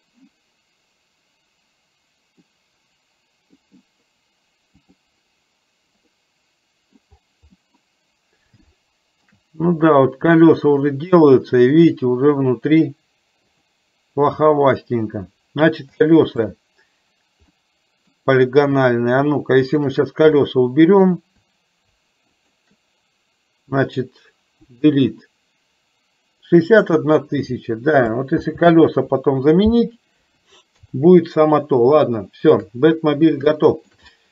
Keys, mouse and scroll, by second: 2.6-3.6 middle drag, 6.2 middle click, 7.8 middle click, 8.7 shift+middle click, 13.6 click, 16.1 shift+middle click, 17.7 middle click, 19.7 shift+click, 20.5 middle click, 22.4 shift+click, 24.7 Delete, 28.5 ctrl+z, 30.3 KP_4, 30.9 KP_3, 32.2 shift+middle click, 33.5 shift+middle click, 34.2-34.3 middle drag.